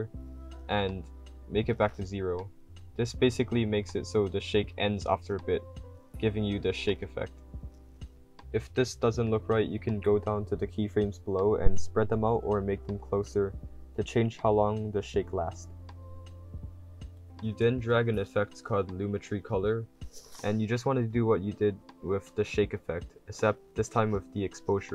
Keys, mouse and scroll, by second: 3.3 w, 3.7 s, 5.2-6.1 typing, 5.8 click, 10.6-13.6 drag, 10.6 d, 13.4-15.4 typing, 14.2 click, 15.2 click.